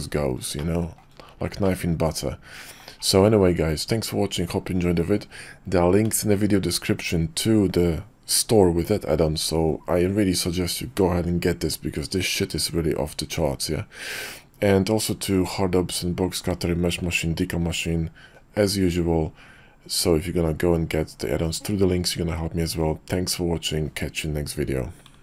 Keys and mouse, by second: 0.6-1.1 shift+middle drag, 1.6-2.8 middle drag.